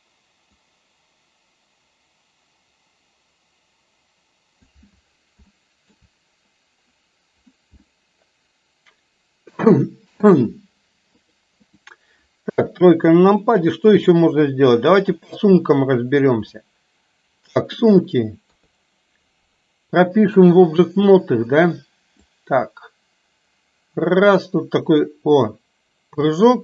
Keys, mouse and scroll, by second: 0.7-4.9 drag, 5.6-6.1 shift+middle drag, 8.1-10.3 middle drag, 11.3-12.0 drag, 12.5 KP_3, 13.5-14.1 shift+middle drag, 15.3 click, 16.8-18.0 middle drag, 18.6 KP_3, 22.4-26.2 drag.